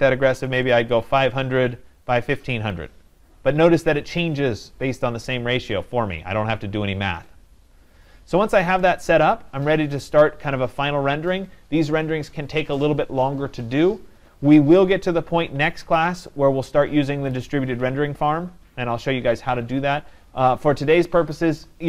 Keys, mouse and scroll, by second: 0.4-0.8 typing, 2.1 click.